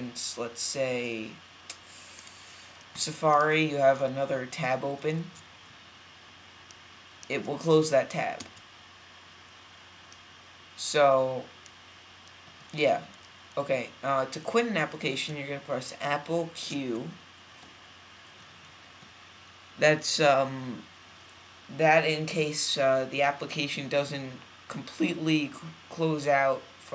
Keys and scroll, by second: 5.1 super+t, 8.3 super+w, 16.6 super+q.